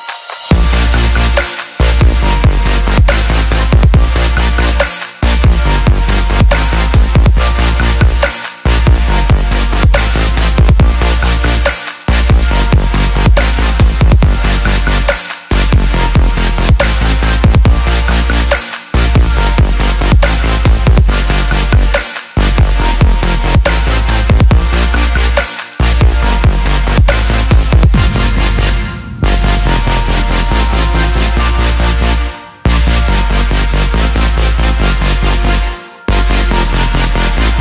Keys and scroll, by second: 26.1 ctrl+t.